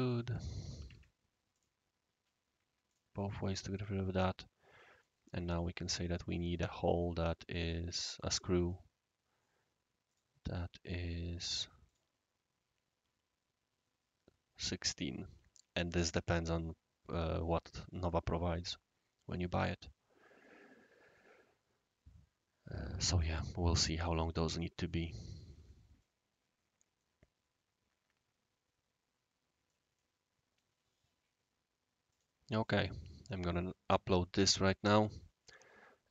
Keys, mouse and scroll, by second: 0.3 click, 0.6-1.3 typing, 0.8 click, 1.5 click, 2.8 click, 3.5-4.3 typing, 3.7 right click, 5.5 click, 5.9 scroll up 1, 6.5 right click, 8.2-10.1 right drag, 10.1 click, 11.8 click, 15.0-16.0 right drag, 16.3 scroll down 1, 16.5 scroll up 1, 16.7 scroll down 1, 17.1-20.4 right drag, 21.1-23.2 right drag, 24.7 right click, 25.7 middle click, 26.3 scroll up 1, 26.4-26.8 scroll down 1, 27.0-29.7 right drag, 30.0 middle click, 32.1 click, 32.6 click.